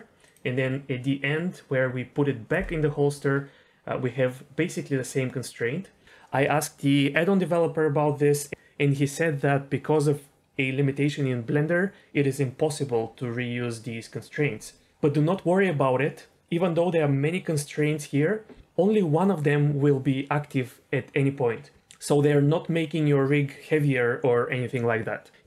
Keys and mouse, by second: 0.2 click.